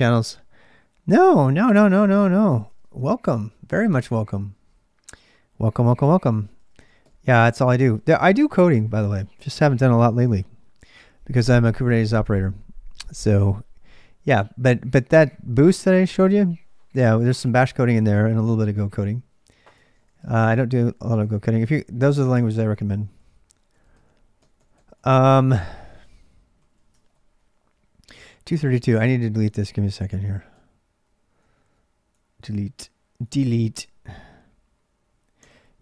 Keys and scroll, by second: 0.0-35.8 typing, 21.1 ctrl+[, 26.8 ctrl+[.